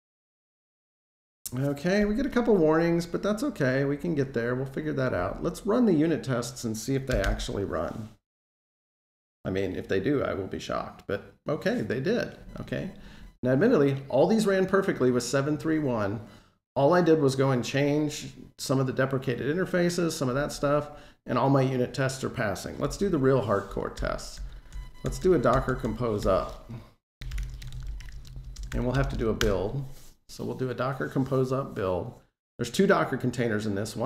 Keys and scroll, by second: 7.0 super+u.